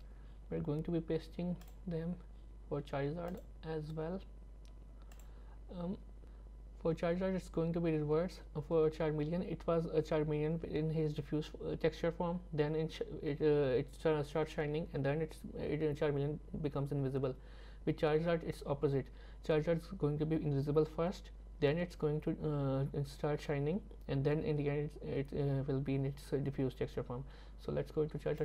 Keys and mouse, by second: 1.7-3.4 drag.